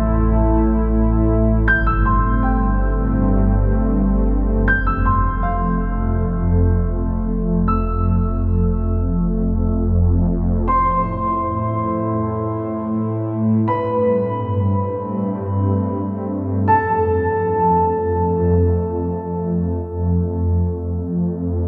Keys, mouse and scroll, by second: 0.1 Tab, 0.3 Tab, 0.5 shift+z, 0.8 click, 1.6 click, 3.3 space, 3.7-4.9 drag, 5.6 middle click, 5.9-7.5 right drag, 8.1 middle click, 8.6 alt+a, 8.9 space, 12.0 middle click, 13.6 middle click, 14.3 shift+middle click, 17.1-19.8 drag, 20.3 click, 20.8-21.6 drag.